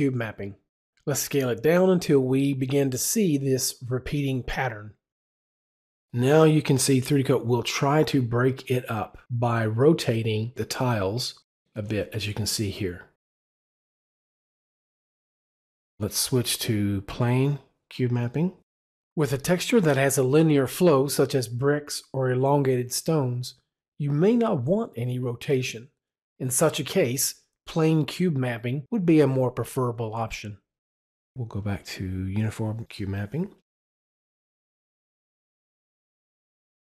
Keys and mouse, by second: 16.6 click, 17.4 click, 19.2 click, 31.6 click, 32.6 click, 33.6 click.